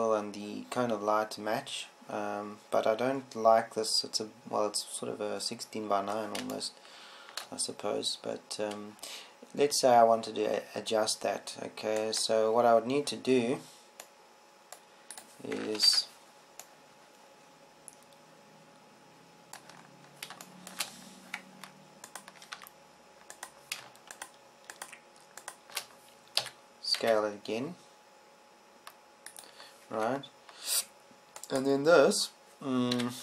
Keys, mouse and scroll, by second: 8.2-10.2 middle drag, 14.6-15.8 right drag, 17.4 ctrl+Up, 24.1 Tab, 28.0 s, 30.9 click, 31.5 Tab, 31.9 click, 32.8 right click.